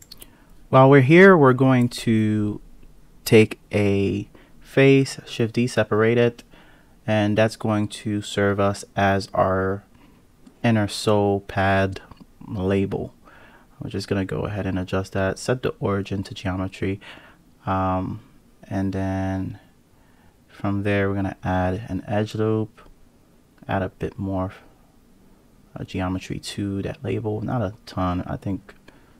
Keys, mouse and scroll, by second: 1.2 shift+d, 3.3 p, 4.6 Tab, 5.6-6.2 scroll down 2, 6.2-6.9 scroll down 8, 6.9 click, 7.3 click, 7.5-10.1 drag, 10.8 KP_7, 12.3 g, 15.2-17.7 drag, 19.1 Tab, 20.5 ctrl+r, 22.4 ctrl+r, 26.4 click, 28.7 click.